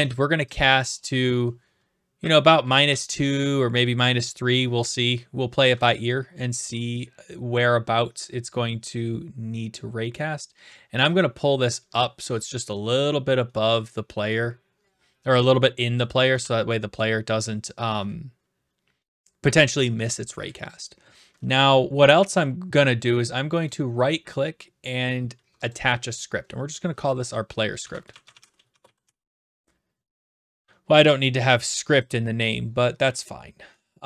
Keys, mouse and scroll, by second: 0.6 click, 1.9-3.1 typing, 4.2 typing, 4.5 right click, 15.9 click, 16.4 typing, 16.7 right click, 17.7 right click, 23.7 right click, 25.7 click, 27.5-29.8 typing, 32.1-33.1 drag.